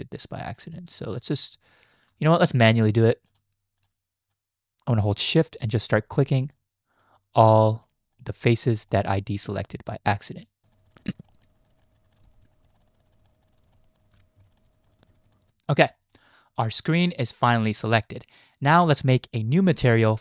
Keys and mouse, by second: 1.2 shift+click, 4.2 shift+click, 4.9 shift+click, 5.9 shift+click, 6.9 shift+click, 7.4 shift+click, 8.1 shift+click, 8.6 shift+click, 8.9 shift+click, 9.5 shift+click, 9.9 shift+click, 10.3 shift+click, 10.8 shift+click, 11.5 shift+click, 12.2 shift+click, 13.0 shift+click, 13.4 shift+click, 14.2 ctrl+z, 14.5 shift+click, 16.0 shift+click.